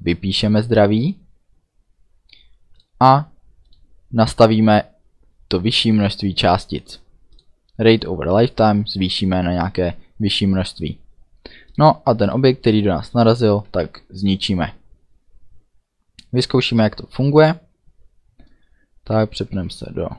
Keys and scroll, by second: 13.6 ctrl+s.